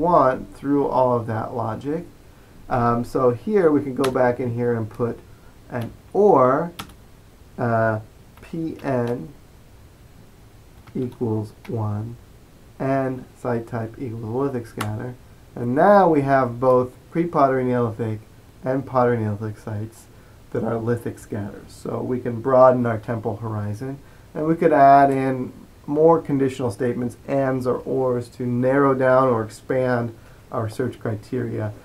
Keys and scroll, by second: 0.6 typing, 5.7-6.6 typing, 8.5-8.9 typing, 10.7-11.7 typing, 14.9 typing.